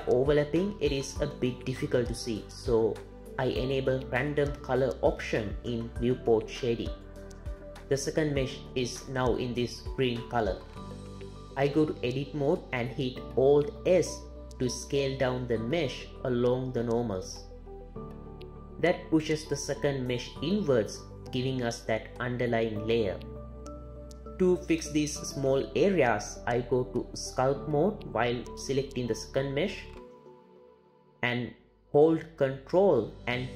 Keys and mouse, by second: 5.2-8.3 drag, 9.9 click, 12.1 Tab, 14.4 alt+s, 16.6 alt+s, 21.7 click, 23.7 alt+a, 24.1 Tab, 26.9 ctrl+Tab, 31.6-32.9 ctrl+drag, 33.1 ctrl+click.